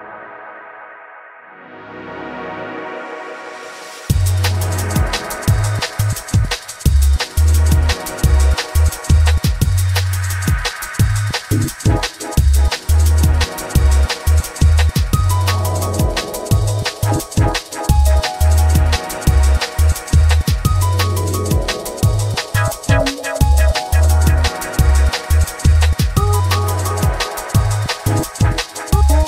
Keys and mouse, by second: 2.8 click, 3.5 Tab, 4.6 alt+shift+click, 5.6 ctrl+KP_Add, 6.2 ctrl+KP_Add, 7.4 ctrl+KP_Add, 9.6 alt+shift+click, 10.4 alt+middle click, 11.7 ctrl+g, 13.5-16.8 drag, 15.8 g, 18.2 Tab, 20.5 ctrl+Tab, 23.2 click, 24.7-26.9 drag, 28.2-29.2 drag.